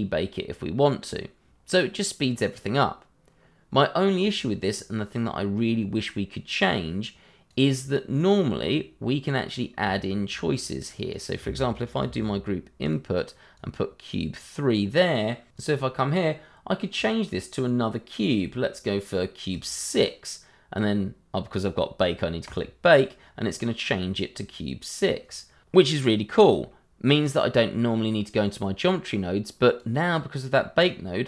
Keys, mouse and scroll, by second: 5.4-6.7 scroll up 1, 6.7 click, 10.0 shift+middle click, 10.0 middle click, 10.2 shift+middle click, 10.6 click, 12.0 shift+d, 12.8 click, 16.2 click, 19.5 click, 22.4 click, 29.1 click.